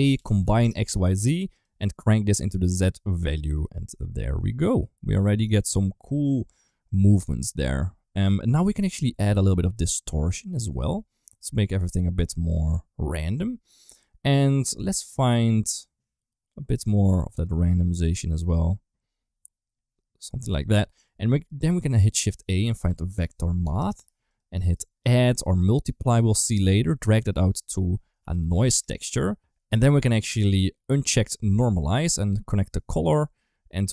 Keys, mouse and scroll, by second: 2.0 click, 3.0 middle click, 3.8-5.1 middle drag, 5.3 shift+middle click, 5.6 middle click, 6.5 middle click, 8.8-12.0 drag, 12.3 middle click, 14.7-16.6 drag, 17.0 click, 18.2-20.3 drag, 20.8 middle click, 21.4 click, 22.1 shift+a, 23.5 Down, 24.7 click, 25.5 click, 26.3 middle click, 27.0 click, 27.2-29.2 drag, 32.5 click.